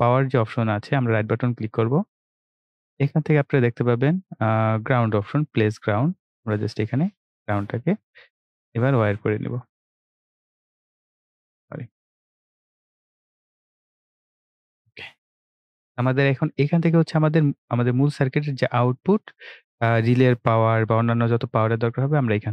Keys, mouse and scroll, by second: 0.8 right click, 1.7-5.5 drag, 7.9 right click, 10.2 w, 11.7 click, 15.3 right click, 20.5 click.